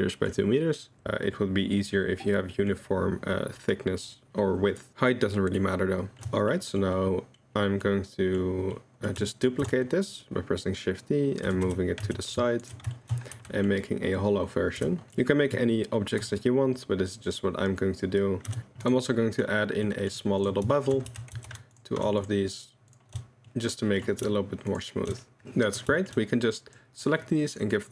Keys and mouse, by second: 1.0-2.3 middle drag, 5.4 middle click, 5.6 middle click, 6.2 shift+Tab, 6.2 shift+middle click, 6.8 middle click, 7.3-7.8 middle drag, 8.4-9.1 middle drag, 9.3 shift+middle drag, 9.6 shift+d, 12.9 shift+right click, 13.4 Tab, 13.5 click, 14.8 3, 15.1 click, 16.2 i, 18.7 g, 19.1-19.4 middle drag, 19.9 middle drag, 20.7 shift+middle drag, 21.1 Tab, 21.3 2, 21.7 alt+click, 23.5-24.0 drag, 24.7 alt+shift+click, 26.0 shift+right click, 26.0 shift+middle click, 26.4-26.7 drag.